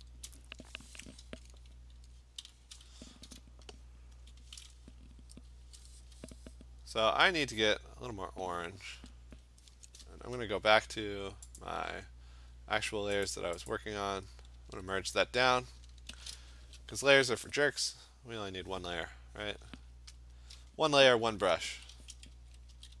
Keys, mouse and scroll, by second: 0.3 click, 1.0 click, 1.2 click, 1.4 click, 2.4-4.1 b, 4.1 click, 5.8 click, 7.8 click, 8.3 click, 9.3 click, 10.2 Return, 11.6 click, 13.3 click, 13.7 click, 14.6 ctrl+e, 16.1 ctrl+shift+n, 16.7 Return, 20.3 click, 21.7-23.0 typing.